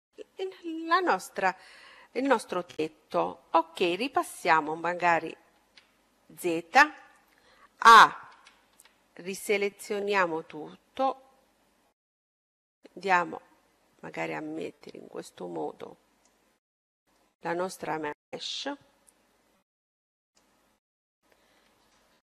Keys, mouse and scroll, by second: 5.5 z, 6.5-8.3 middle drag, 8.1 a, 8.7 a, 9.8-11.5 drag, 16.6-18.7 middle drag, 19.5-21.4 middle drag, 20.2-21.9 right drag.